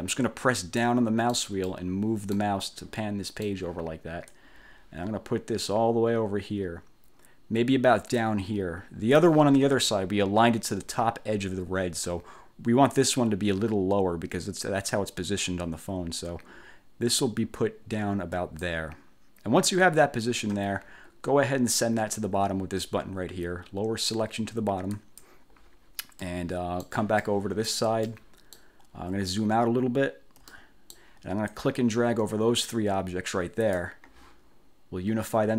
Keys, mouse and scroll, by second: 0.7 click, 1.7 click, 2.9 click, 4.4-9.5 drag, 13.1-18.9 drag, 25.1 click, 26.3 click, 27.3 click, 28.2 click, 29.7 ctrl+scroll down 2, 30.3 ctrl+scroll down 2, 30.6 ctrl+click, 31.1 middle click, 31.6-34.1 drag.